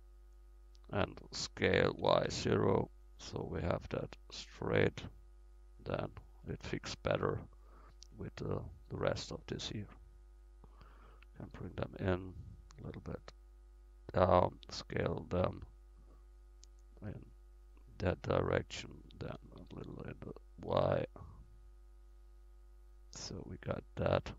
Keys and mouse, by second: 0.6 middle click, 1.7 s, 4.0-5.7 drag, 6.6 Tab, 7.9-13.1 drag, 14.7 s, 17.3 click, 19.4 s, 23.8 middle click, 24.0-24.3 middle drag.